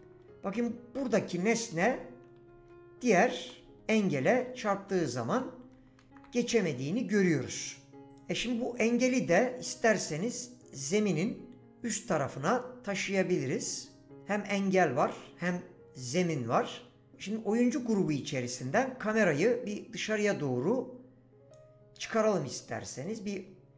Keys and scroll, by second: 0.0-6.6 typing.